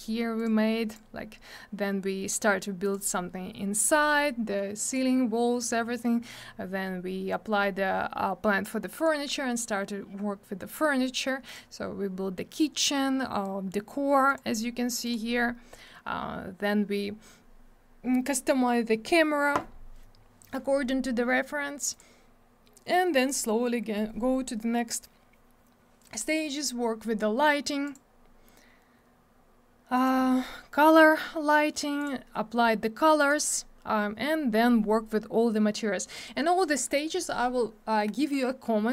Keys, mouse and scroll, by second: 0.4 click, 0.9 click, 2.8 click, 3.7 click, 4.8 click, 8.9 click, 10.6 click, 10.7 click, 11.4 click, 11.5 click, 14.3 click, 14.3 click, 15.0 click, 15.1 click, 21.9 click, 22.0 click, 27.8 click, 27.9 click, 29.9 click, 32.0 click, 33.3 click, 36.1 click, 36.2 click.